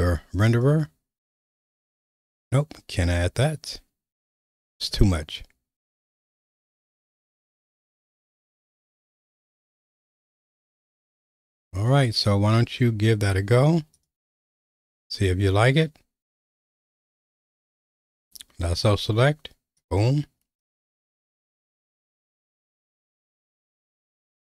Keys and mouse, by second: 1.5-3.0 right drag, 4.2 click, 4.8 right click, 8.8 click, 14.0-18.4 drag, 18.8 q, 20.9-22.0 drag, 23.0-23.9 drag.